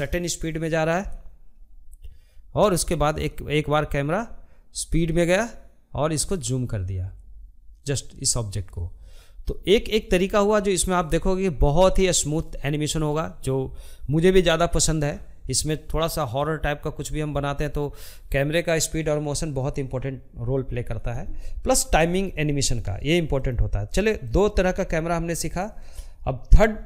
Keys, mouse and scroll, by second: 21.4-26.8 drag.